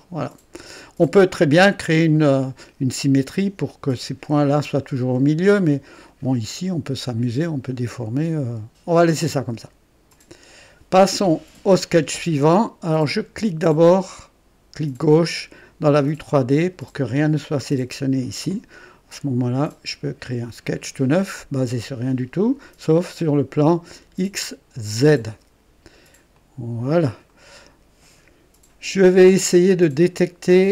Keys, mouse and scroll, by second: 6.0-9.4 drag, 10.1 click, 12.9 click, 16.0 click, 19.6 click, 24.9 click, 26.3 click, 27.3 right click, 30.5 click.